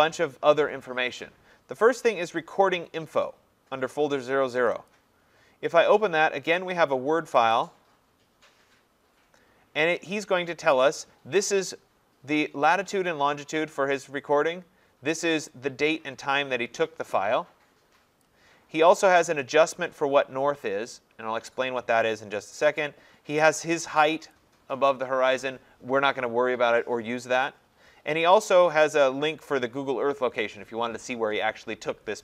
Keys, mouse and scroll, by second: 4.7 click, 4.9 click, 7.3 click, 7.5 click, 10.2 middle click, 13.5-13.9 scroll, 13.9 click, 18.2 click, 22.0 click, 24.3 click, 28.2 click.